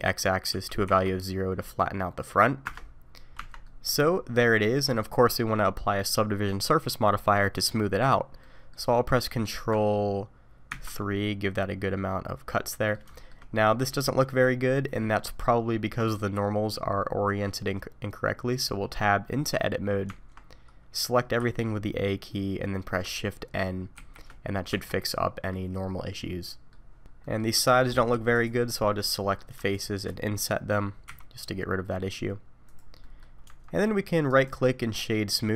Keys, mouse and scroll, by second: 3.4 Tab, 3.6 middle click, 8.4 middle click, 10.7 ctrl+3, 11.1 middle click, 13.1 shift+middle click, 13.5-14.2 scroll up 2, 14.6 middle click, 18.5-20.1 scroll down 1, 20.1 Tab, 20.1-21.4 scroll down 1, 21.4 a, 24.0 shift+n, 24.7 Tab, 25.1 middle click, 27.2 middle click, 27.5 Tab, 28.3 click, 28.7-29.0 scroll down 3, 29.0 middle click, 29.7 shift+click, 31.2 i, 33.0 middle click, 33.5 Tab, 34.3 right click.